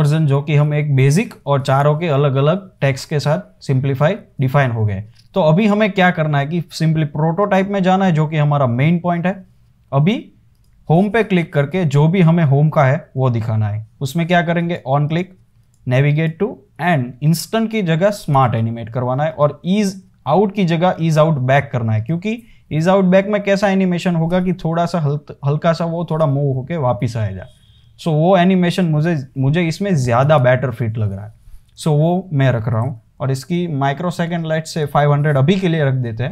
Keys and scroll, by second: 33.5 shift+Up, 33.8 shift+Up, 35.7 Return.